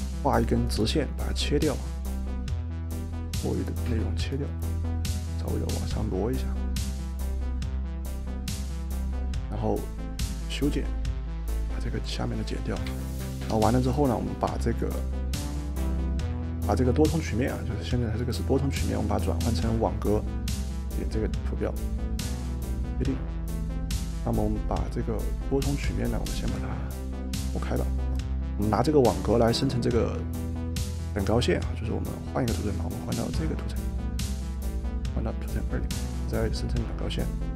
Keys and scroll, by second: 12.9 Escape, 13.3 Escape, 13.5 Escape, 14.6 Delete.